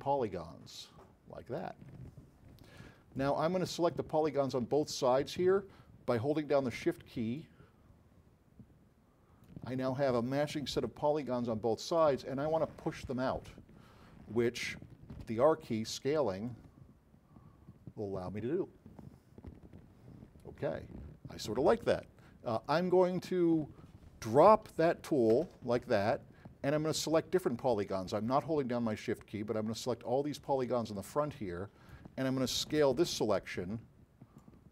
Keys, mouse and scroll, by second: 7.4-9.5 shift+drag, 10.9-12.1 alt+drag, 15.2 r, 20.1-21.6 drag, 25.5 q, 27.1-29.0 drag, 33.2 r, 34.5-34.7 drag.